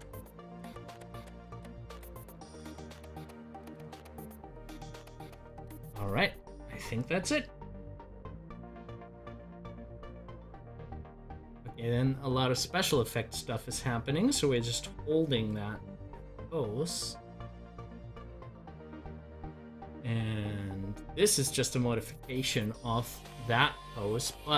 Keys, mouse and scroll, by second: 1.3-4.8 drag, 7.5-18.5 drag, 22.5 click.